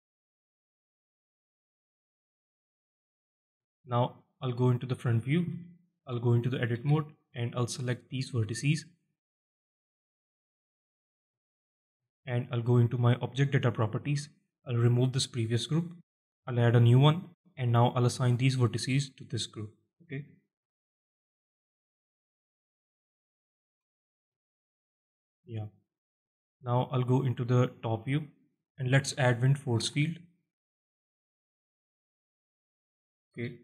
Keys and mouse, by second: 1.3 shift+middle drag, 3.1-3.5 alt+shift+middle drag, 3.5 click, 4.4 middle drag, 5.3 KP_1, 6.0 Tab, 6.5 z, 7.1 alt+shift+middle click, 7.2 shift+click, 7.2 alt+shift+middle click, 8.4-10.6 drag, 11.2 alt+shift+middle click, 11.9 alt+shift+middle click, 15.2 click, 16.2 click, 18.3 click, 18.4 click, 18.6 click, 20.2 alt+shift+click, 20.6 z, 21.7 click, 23.6 Tab, 24.0 z, 24.5 middle drag, 25.4 alt+shift+middle drag, 26.1 middle drag, 26.6 alt+shift+middle drag, 27.7 KP_7, 28.6 alt+shift+drag, 29.6 shift+a, 33.1 z.